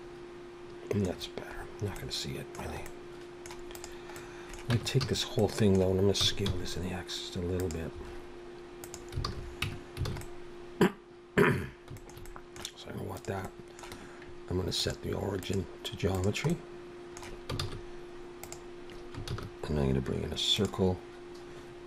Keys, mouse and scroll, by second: 1.1-2.0 scroll down 6, 2.0 middle click, 2.9 middle click, 3.8 click, 4.1 middle click, 4.7 Tab, 5.0 a, 5.4 middle click, 6.2 s, 8.8 click, 9.3 alt+a, 9.7 Tab, 10.1 alt+a, 10.2 middle click, 11.6-12.0 scroll down 3, 12.0 shift+middle click, 12.3 middle click, 13.1 click, 13.4 middle click, 14.8 click, 17.2 middle click, 17.6 shift+s, 19.3 shift+a.